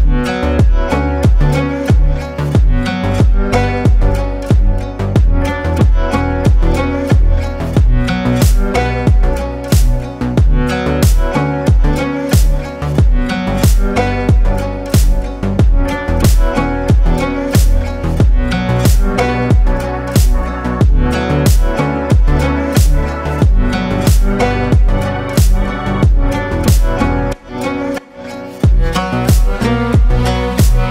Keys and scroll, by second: 0.1 ctrl+g, 4.0 Down, 4.4 Down, 4.7 Down, 5.7 ctrl+space, 6.6 ctrl+space, 9.1 Up, 9.3 Up, 9.4 Up, 10.3 ctrl+space, 15.5 ctrl+space, 16.7 ctrl+space, 17.6 ctrl+space, 18.2 ctrl+space, 19.0 ctrl+space, 19.7 ctrl+space, 22.5 Up, 23.6 ctrl+space, 27.7 ctrl+space, 29.8 ctrl+space.